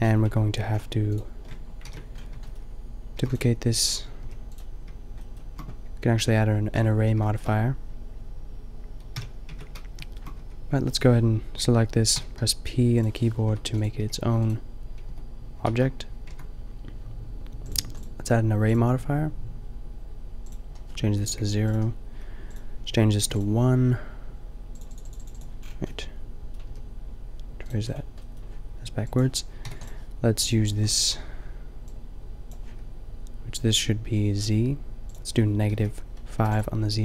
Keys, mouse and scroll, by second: 0.0-3.9 drag, 0.3 Tab, 1.9 ctrl+l, 3.1 shift+f, 4.2 g, 6.1 Tab, 6.7 Tab, 9.1 n, 9.5 Tab, 10.4 Tab, 12.1 p, 13.5 Tab, 13.9 g, 15.0 Tab, 15.6 shift+s, 16.2 Tab, 25.5 middle click, 26.6 g, 27.8-31.8 drag.